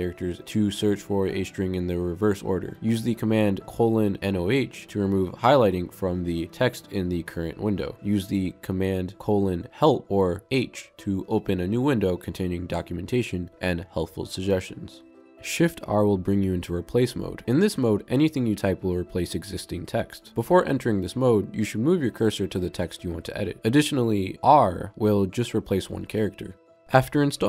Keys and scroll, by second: 4.8 typing, 10.0-10.7 typing, 20.0 shift+r, 25.3 r.